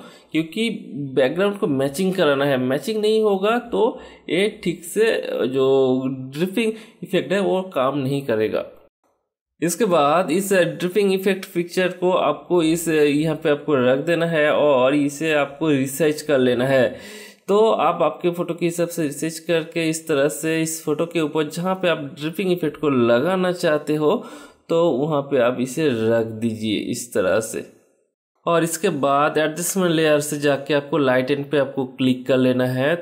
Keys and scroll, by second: 8.7 v, 22.1 BackSpace.